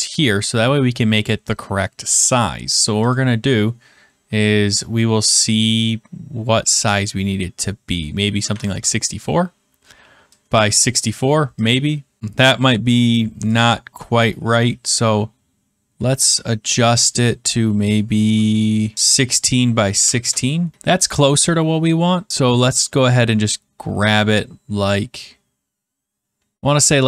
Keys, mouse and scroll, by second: 8.1-8.9 typing, 10.5 click, 12.2 click, 13.0 click, 13.5 click, 16.0 click, 16.8 click, 18.9 Return, 18.9-20.5 typing, 19.4 click, 20.7 middle click, 20.7 click, 26.7 click.